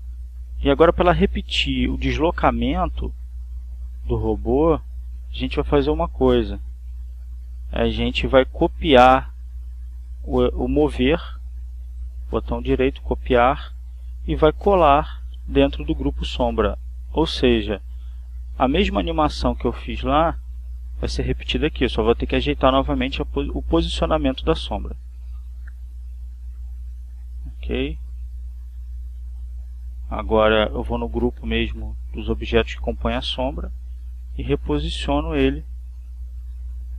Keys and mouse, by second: 0.6 click, 1.4-2.5 drag, 2.8 Up, 3.5 Left, 4.6 Up, 10.5 click, 11.2 click, 12.1 right click, 13.2 click, 14.0 click, 15.3 click, 16.1 click, 17.0 right click, 18.0 click, 19.4-26.0 drag, 28.4-30.6 drag, 31.8 click, 32.9 click, 34.4 ctrl+click, 35.6 Right.